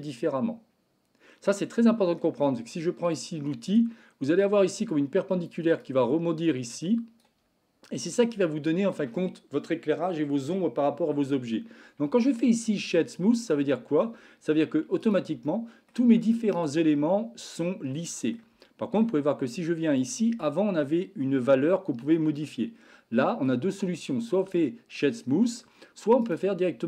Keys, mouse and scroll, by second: 1.4 middle click, 4.3-5.5 drag, 5.7-7.3 drag, 12.4 shift+middle click, 15.0 click, 15.5 shift+middle click, 16.1 Tab, 17.0-18.3 middle drag, 18.6-19.0 shift+middle drag, 23.2-23.5 middle drag, 24.5-25.0 shift+middle drag, 25.3-25.7 middle drag, 26.3-26.8 right drag.